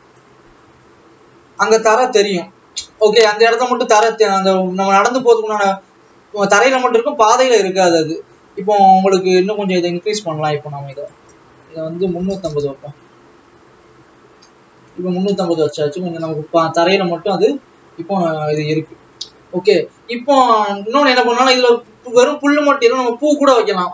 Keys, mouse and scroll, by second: 1.1 click, 2.8 click, 4.7-5.2 scroll up 1, 12.9-15.3 drag, 15.9 ctrl+s, 16.6 alt+a, 17.5 click, 22.9 ctrl+s.